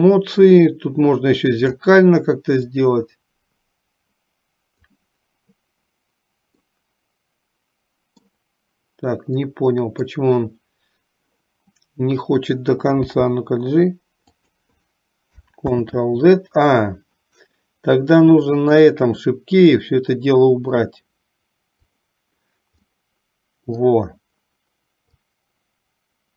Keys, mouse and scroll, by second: 2.8-5.0 drag, 6.7-8.5 middle drag, 9.5 middle click, 19.7-20.8 drag, 22.0 click, 23.0 middle click, 25.2-26.3 drag.